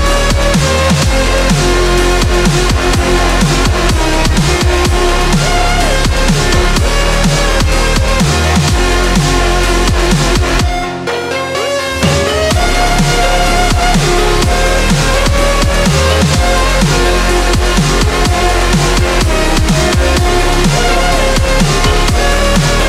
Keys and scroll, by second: 8.5 x.